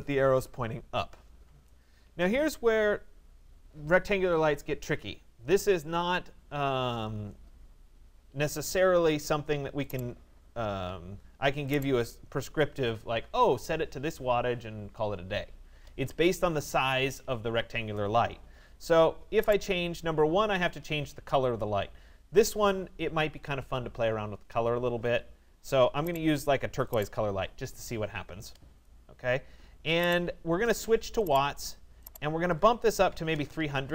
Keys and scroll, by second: 32.7 3.